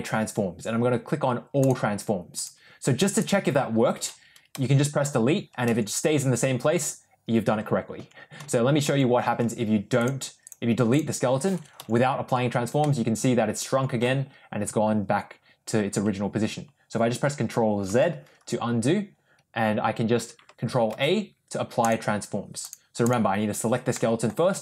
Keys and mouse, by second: 3.1 click, 4.4 Delete, 10.8 ctrl+click, 11.7 Delete, 12.7-13.9 middle drag, 22.9 ctrl+click, 23.8 ctrl+middle click.